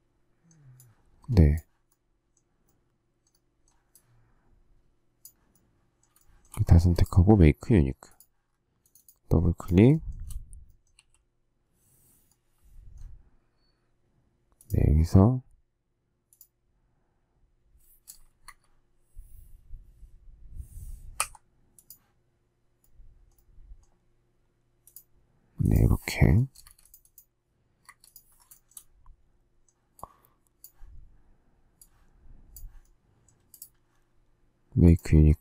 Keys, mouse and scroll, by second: 6.1 shift+middle click, 9.9 shift+middle click, 10.0 shift+double middle click, 10.9 q, 18.4 Escape, 26.5 space, 26.6 Escape, 27.8 Escape, 28.5 shift+middle click.